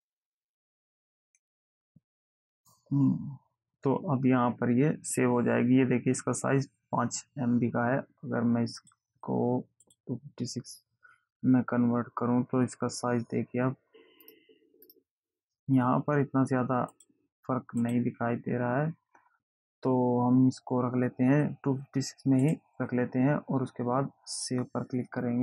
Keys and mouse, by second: 9.1 click, 10.2 click, 14.5 click, 15.1 click, 17.3 click, 22.7 click, 24.7 click.